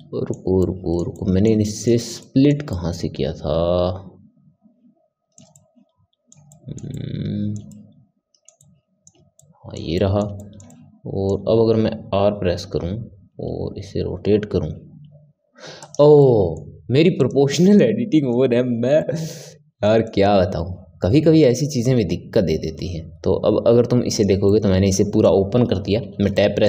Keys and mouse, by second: 12.6 r, 16.1-17.1 middle drag, 17.1 click, 17.5-20.4 middle drag, 20.4 r, 24.5-26.0 middle drag, 26.0 Tab, 26.3-26.6 middle drag.